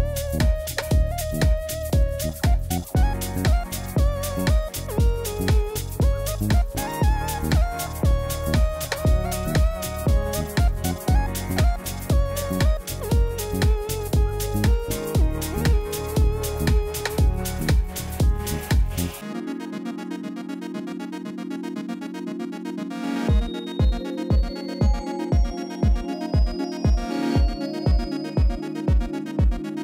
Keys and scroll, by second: 5.2 Tab, 5.9 s, 7.8 Tab, 15.5 3, 20.2 g, 20.6 z, 24.3 alt+a.